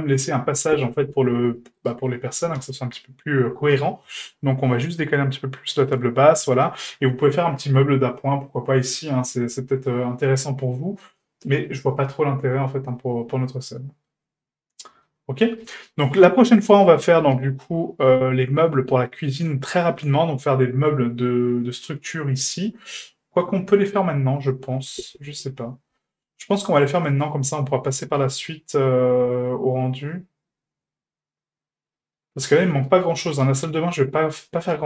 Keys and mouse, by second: 0.9 middle drag, 1.8 right click, 2.6 g, 6.5 shift+middle click, 9.0-9.3 middle drag, 9.4 a, 10.4-11.0 middle drag, 11.7 middle drag, 12.1-13.6 middle drag, 13.8-14.1 shift+middle drag, 14.4-15.1 middle drag, 15.6 shift+middle drag, 16.2 middle drag, 16.8 shift+middle drag, 17.2 middle drag, 17.7 shift+middle drag, 18.3 middle drag, 18.9-19.3 shift+middle drag, 22.9-23.9 middle drag, 25.4 n, 26.3-27.0 middle drag, 27.7 middle drag, 28.2-32.5 middle drag, 32.8 shift+middle drag, 33.2 middle drag.